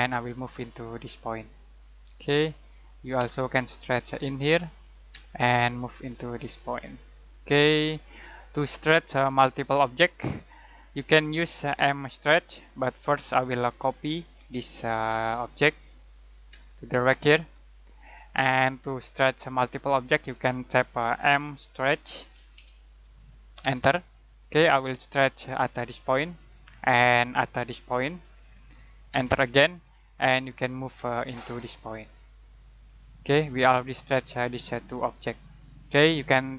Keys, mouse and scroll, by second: 0.0 click, 3.1 space, 4.0 click, 5.1 space, 5.5 click, 8.5 middle click, 13.6-14.9 typing, 15.5 click, 16.5 space, 16.7 click, 18.3 space, 18.8 middle click, 21.0-23.6 typing, 25.5 click, 29.1 space, 30.4 click, 35.2 click.